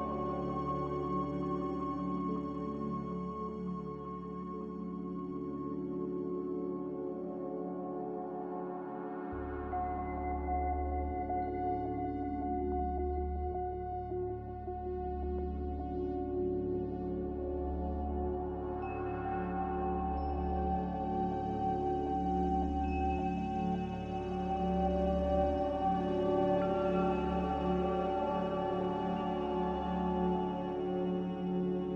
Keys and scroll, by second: 5.3-6.1 typing, 9.0 c, 11.5 ctrl+z, 14.3-15.1 typing, 16.6 c, 20.9 z, 23.2-24.2 typing.